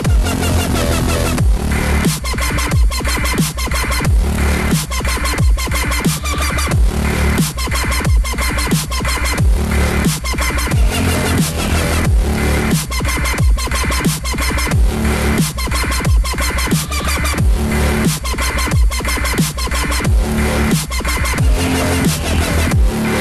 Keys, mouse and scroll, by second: 0.6-2.9 scroll up 1, 2.9 ctrl+r, 6.0 middle click, 6.8 scroll up 1, 7.1 scroll down 1, 7.2-8.8 middle drag, 8.8 scroll down 1, 8.9-9.2 scroll up 1, 9.2 r, 13.1 s, 14.3 scroll up 1, 14.3-14.8 scroll down 3, 14.8-16.9 middle drag, 16.9-17.7 scroll up 7, 17.7-20.7 middle drag, 21.3-21.8 scroll down 2, 21.9-23.2 middle drag.